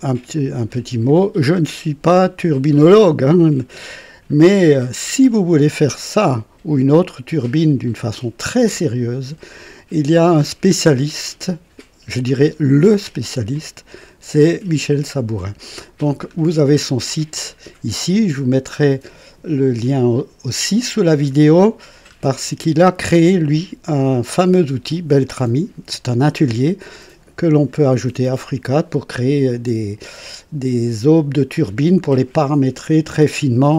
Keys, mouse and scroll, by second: 0.3 click, 2.1-4.9 drag, 5.0 right click, 5.8-9.6 drag, 13.5 click, 16.2-16.9 scroll up 2, 17.4 scroll up 2, 21.1-22.0 scroll down 4.